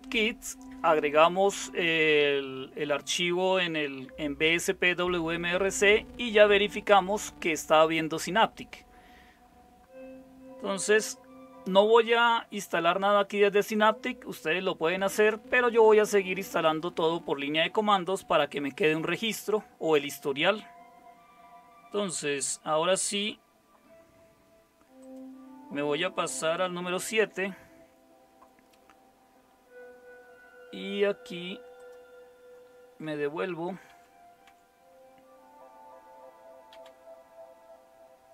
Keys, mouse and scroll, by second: 27.0 super+7, 33.2 Left, 33.9 Left, 34.4 Left, 36.7 Left.